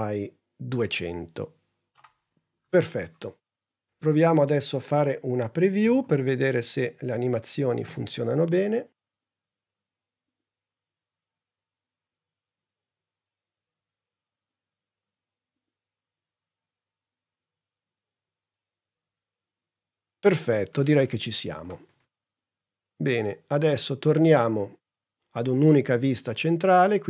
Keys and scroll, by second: 5.8 n, 7.8 space.